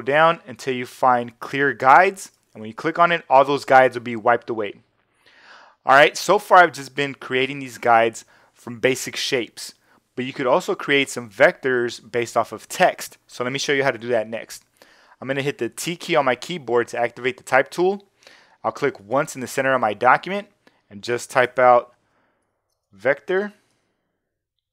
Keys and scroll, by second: 15.7 t, 22.0-23.7 typing.